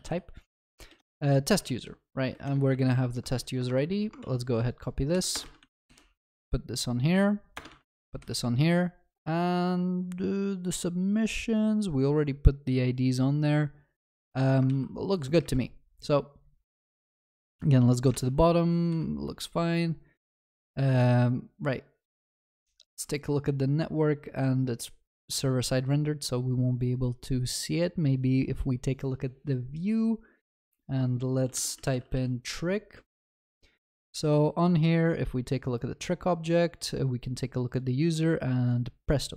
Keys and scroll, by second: 0.9 Return, 4.2 ctrl+s, 5.4 ctrl+v, 14.7 ctrl+s, 15.5 alt+F12.